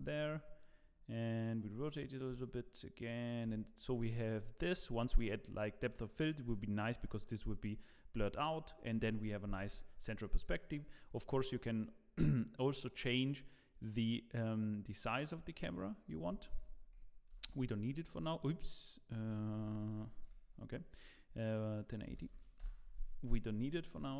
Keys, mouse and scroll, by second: 0.2 middle click, 2.4 shift+middle click, 13.7 click, 14.5 click, 16.2 Escape, 17.3 ctrl+z, 19.9 ctrl+shift+z, 21.5 click, 23.7 scroll down 1.